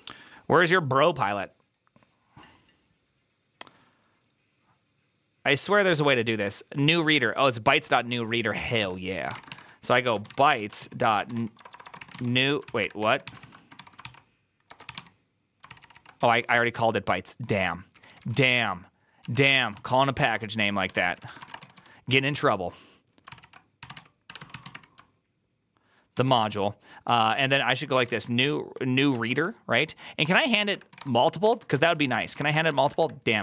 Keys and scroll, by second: 8.6 alt+{, 8.6 ctrl+c, 8.9-16.6 typing, 15.6 ctrl+c, 17.8-25.1 typing, 26.0 ctrl+y, 26.4 ., 27.5-29.0 typing, 29.0 ctrl+n, 29.2 ctrl+y, 30.5-33.4 typing, 31.7 ctrl+c, 31.8 ctrl+c.